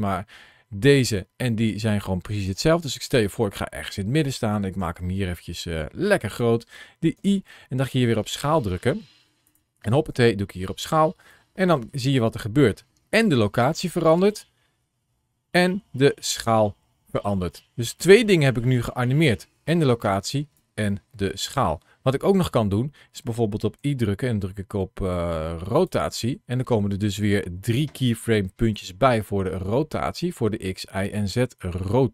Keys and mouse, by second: 2.9 click, 4.6 s, 6.1 click, 7.0 i, 11.1-17.0 drag, 17.3 space, 19.9 space, 20.4 click, 23.6 i, 27.2 ctrl+shift+a.